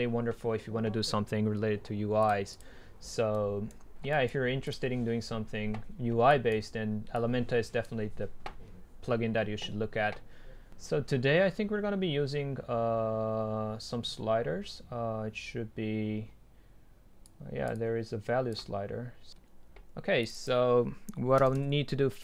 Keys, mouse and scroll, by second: 2.3-3.4 drag, 3.4-4.2 right drag, 4.2-5.8 middle drag, 5.8-9.8 drag, 17.3-22.2 drag.